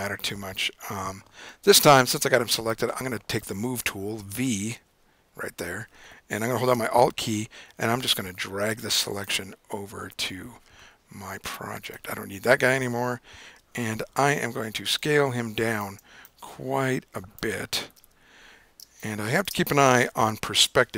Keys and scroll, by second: 4.8 v, 18.1 super+=, 20.1 super+-.